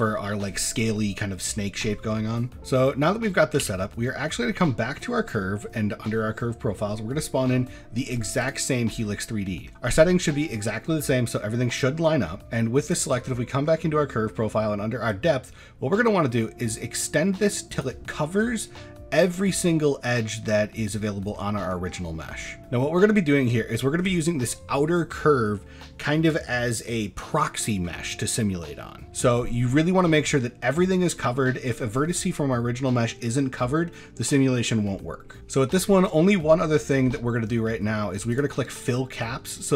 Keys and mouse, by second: 0.1 shift+middle drag, 2.0 middle drag, 2.5 middle drag, 3.2 middle click, 3.6 shift+a, 8.9-9.6 middle drag, 9.9 middle drag, 10.6 shift+middle drag, 11.2-11.7 middle drag, 12.4 Tab, 12.8 click, 15.3-17.9 drag, 18.1-18.5 middle drag, 18.8-19.1 middle drag, 19.3 shift+middle click, 19.7-20.4 middle drag, 20.7 middle click, 21.0 shift+middle click, 21.4 middle click, 22.1 shift+middle click, 22.4 middle drag, 23.5 shift+middle click, 29.3 middle drag, 30.3 middle drag, 30.9 shift+middle drag, 31.2 middle drag, 31.5 shift+middle drag, 35.3 middle click, 38.3 click, 38.9 middle drag, 39.6 shift+middle click.